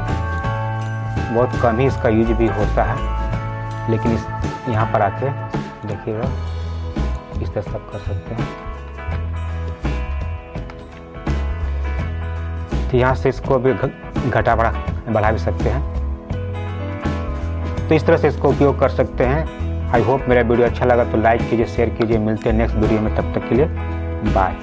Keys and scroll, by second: 9.4 ctrl+alt+z.